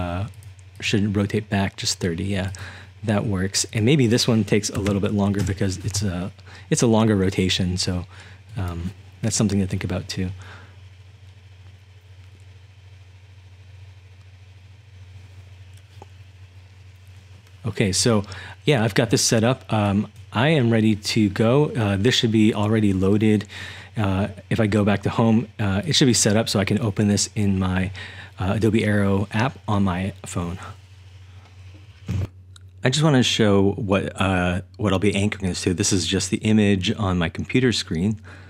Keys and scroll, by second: 4.5-5.8 typing.